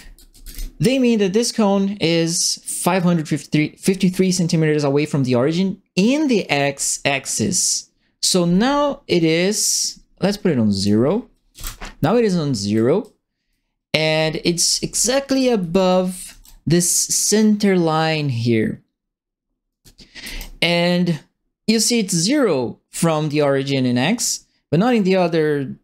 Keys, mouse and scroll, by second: 0.0-0.8 typing, 2.4-9.8 drag, 10.7 click, 11.5 KP_0, 12.7-16.4 right drag, 13.0 a, 14.1-16.2 typing, 19.5-20.3 typing, 19.7 right click.